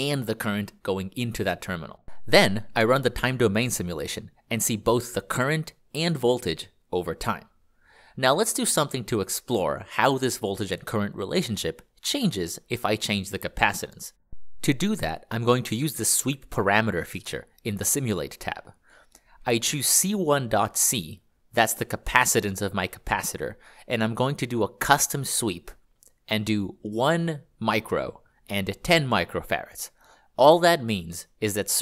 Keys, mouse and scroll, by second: 13.0 click, 14.9 ctrl+click, 19.0-21.8 scroll, 21.8 click, 26.8-27.9 typing, 29.0-29.7 typing.